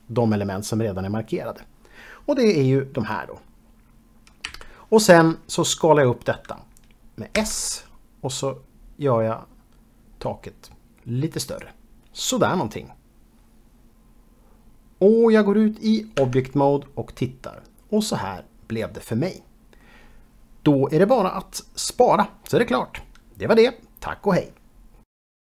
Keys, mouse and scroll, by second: 4.6 KP_3, 7.5 s, 11.6 click, 16.3 Tab, 17.0 middle click.